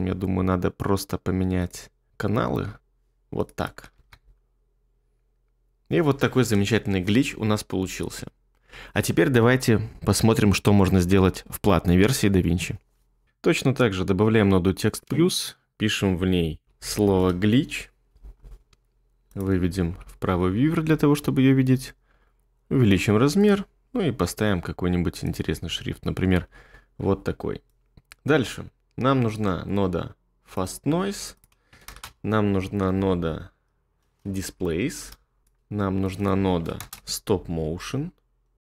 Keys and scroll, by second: 3.9 space, 15.9-17.5 typing, 19.9 2, 31.9-33.6 typing, 34.4 Down, 34.6 Down, 36.8-38.7 typing.